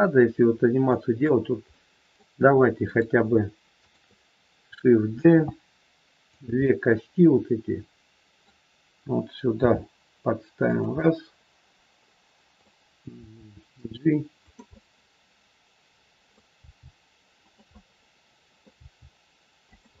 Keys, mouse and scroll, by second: 0.3-0.8 scroll up 2, 0.8 middle click, 1.7 middle click, 2.8 click, 3.8 shift+click, 5.1 shift+d, 6.5 middle click, 9.5 g, 10.9 middle click, 13.1 g, 14.6 middle click, 14.6-15.4 scroll up 1, 16.6 g, 17.8 middle click, 18.8 g.